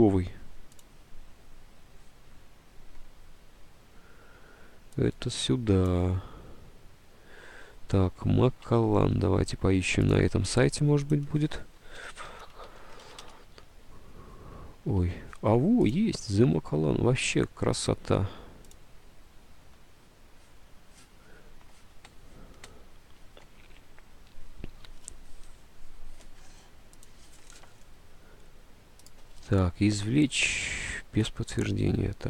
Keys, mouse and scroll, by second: 8.6 alt+Tab, 9.3 alt+Tab, 11.8-13.6 typing.